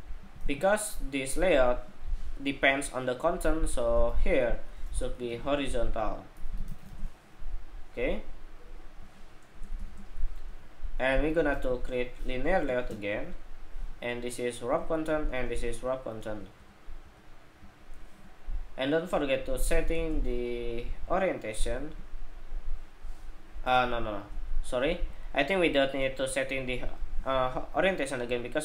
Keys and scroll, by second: 0.1 super+v, 1.4 super+v.